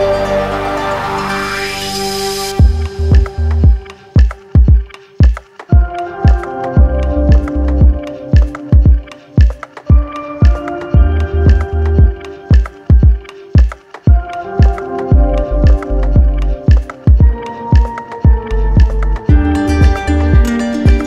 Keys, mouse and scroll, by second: 3.0 click, 3.5 shift+click, 7.7 ctrl+click, 8.2 ctrl+click, 8.7 shift+click, 10.1 click, 10.6 ctrl+click, 12.5 ctrl+click, 12.8 ctrl+click, 15.7 click, 16.8 alt+click, 17.4-19.2 ctrl+alt+drag.